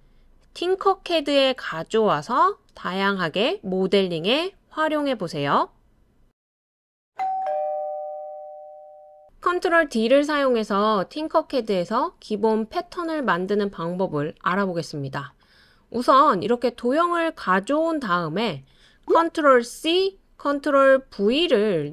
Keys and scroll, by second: 19.7 super+ㅊ, 21.1 super+ㅍ.